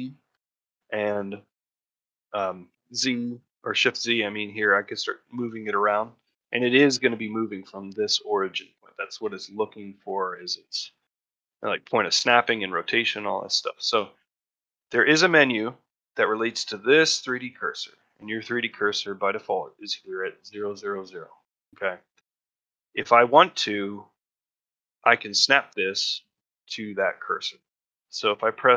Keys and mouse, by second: 15.9 shift+middle drag, 17.7 middle click, 21.7 shift+middle drag, 22.1 middle drag, 22.5 shift+middle click.